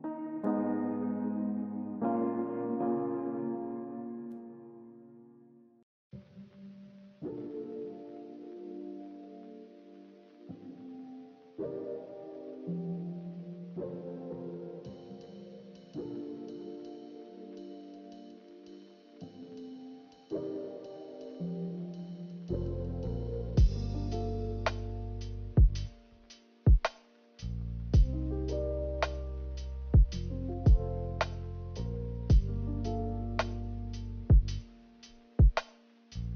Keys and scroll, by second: 6.1 z.